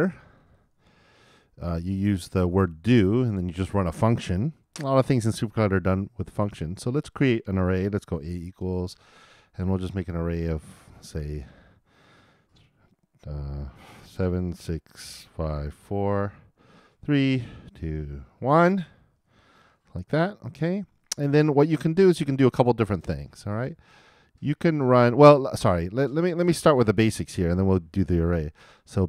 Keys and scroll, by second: 23.9 super+Return.